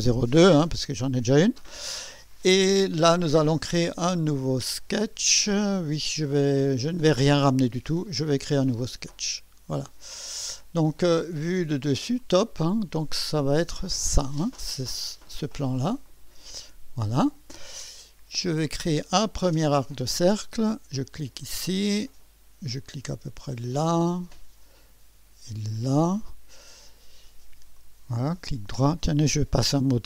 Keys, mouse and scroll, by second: 0.0-0.6 typing, 9.1 click, 10.2 scroll up 2, 12.2 click, 13.7 click, 16.0 click, 19.9 click, 21.4 click, 23.6 click, 25.8 click, 27.7 right click.